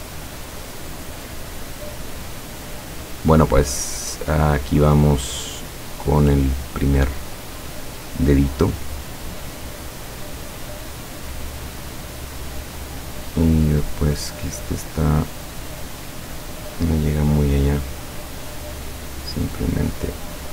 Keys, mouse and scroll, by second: 8.9 click, 17.0 click, 19.3-19.9 drag.